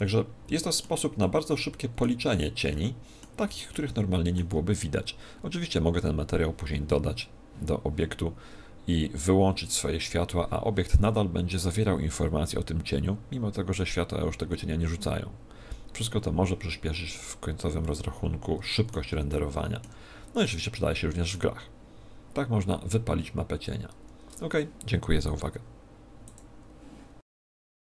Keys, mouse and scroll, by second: 17.4-17.8 scroll down 3, 17.8 middle click, 19.2 shift+middle click, 20.4 middle click.